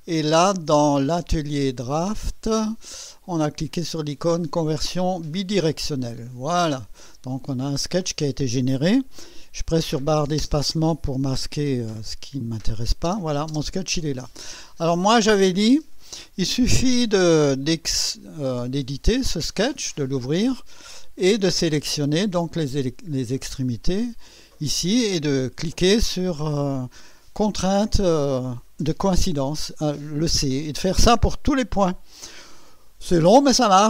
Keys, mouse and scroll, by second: 1.1 click, 2.2 click, 5.3 click, 6.5-7.4 drag, 10.4 space, 12.4 click, 13.1 space, 17.6 click, 19.4-20.2 right drag, 20.3-20.6 scroll up 1, 21.0-21.8 right drag, 22.7 right click, 23.3-24.3 drag.